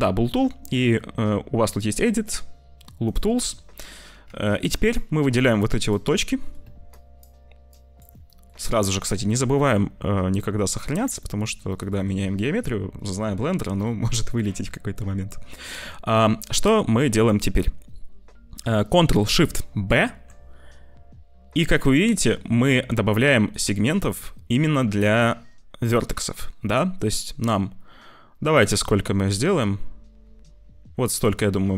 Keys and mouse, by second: 3.0 click, 4.2 1, 4.5 click, 5.4 shift+click, 6.2 click, 6.9 shift+click, 7.7 shift+click, 8.2 click, 8.6 ctrl+s, 11.1 click, 11.7 shift+click, 19.8 ctrl+shift+b.